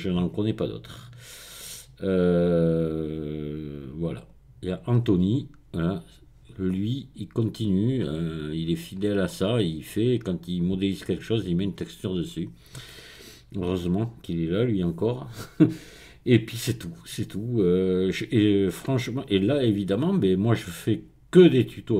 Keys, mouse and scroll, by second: 4.2 click, 8.2-9.0 scroll down 2, 9.0-9.5 scroll down 1, 9.5-10.3 scroll up 3, 10.3-11.2 scroll down 2, 11.8-12.7 scroll up 2.